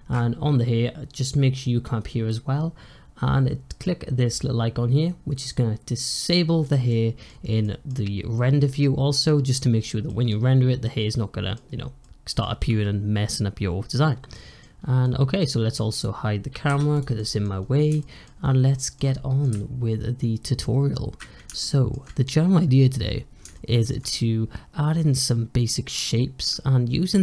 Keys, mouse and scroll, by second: 6.1 click, 6.5 click, 6.8 middle click, 7.1-7.5 scroll down 1, 7.5-9.6 middle drag, 9.6 scroll up 2, 9.9-13.9 middle drag, 13.9 scroll down 1, 14.2 middle click, 14.7 scroll down 1, 14.9-15.4 middle drag, 15.4-15.8 scroll up 2, 15.8 click, 16.6 h, 16.8 click, 17.1-17.5 middle drag, 17.5-17.9 scroll up 2, 17.9-19.4 shift+middle drag, 21.5-27.2 shift+middle drag.